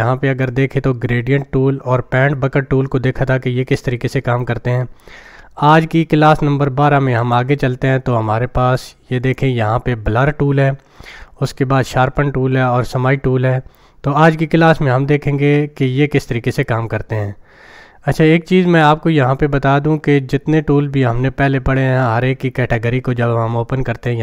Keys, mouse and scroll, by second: 7.2-9.4 drag, 24.1-24.2 drag.